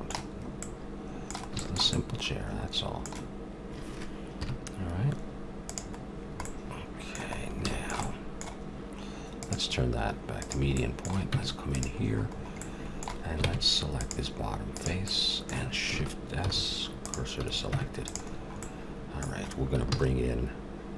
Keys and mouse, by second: 0.3 middle click, 1.2-4.3 middle drag, 4.3 KP_7, 5.6-7.2 drag, 9.4-11.1 drag, 11.1 middle click, 11.2 Tab, 12.4 middle click, 13.4 ctrl+Tab, 16.5 shift+s, 17.3 a, 17.7 Tab, 19.9 shift+a.